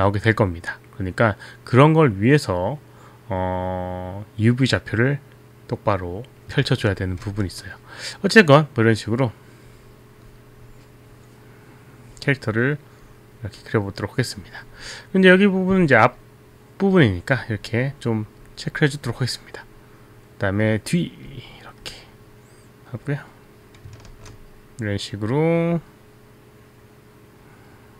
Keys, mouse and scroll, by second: 6.9 ctrl+z, 7.5 ctrl+z.